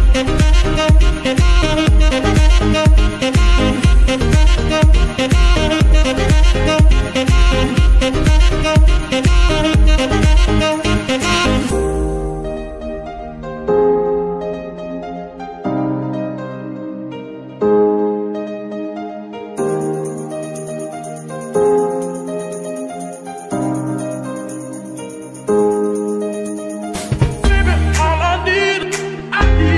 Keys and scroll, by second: 11.3 ctrl+Tab, 16.5 g, 16.6 y, 17.7 Escape, 19.7 ctrl+Tab, 26.1 r.